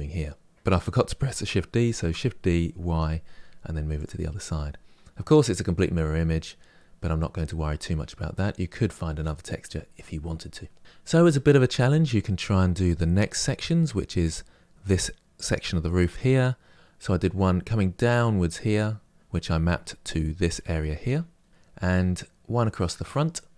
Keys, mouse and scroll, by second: 1.7 shift+d, 4.3-23.3 middle drag.